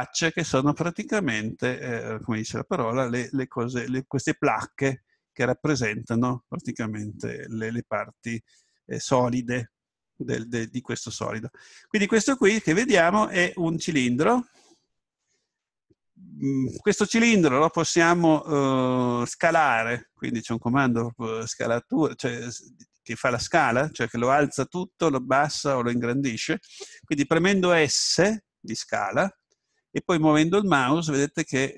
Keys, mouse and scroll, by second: 29.3 s.